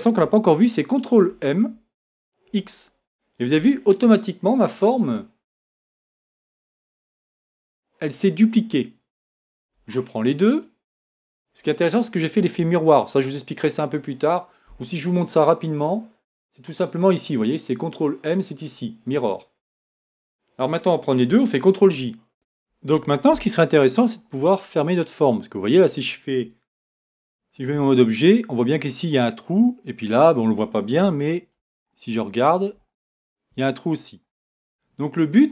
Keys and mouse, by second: 1.3 ctrl+m, 21.8 ctrl+j, 22.3 a, 24.2-25.4 middle drag, 25.7-26.7 middle drag, 26.7 a, 27.7 Tab, 31.2 middle click, 31.9-33.0 middle drag, 35.3 click.